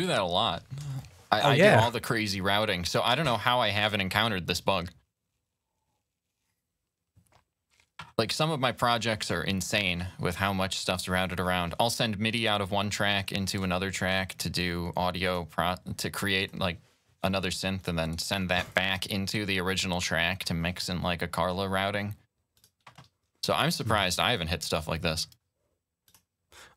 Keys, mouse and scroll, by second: 15.0 click, 16.2 click, 17.5 click, 18.4 click, 22.3 click, 23.7 shift+n, 25.8 click.